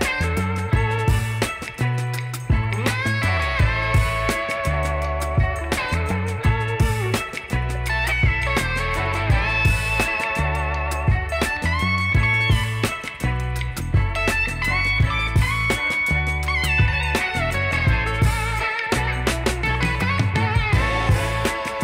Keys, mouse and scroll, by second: 7.2 alt+scroll up 1, 7.5 alt+scroll down 1, 7.7 alt+middle click, 8.2 alt+scroll up 1, 9.0 alt+scroll down 1, 11.6 double click, 15.7 alt+middle click, 17.5 double click, 19.9-20.2 alt+scroll down 1.